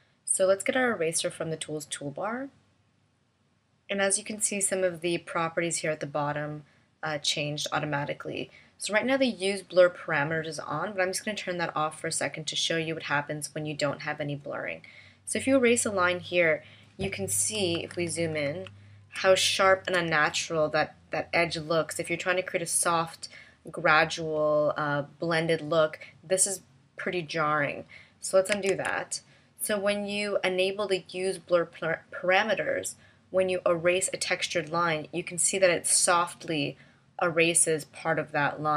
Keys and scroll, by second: 17.9 super+=, 19.1 space, 28.7 super+z.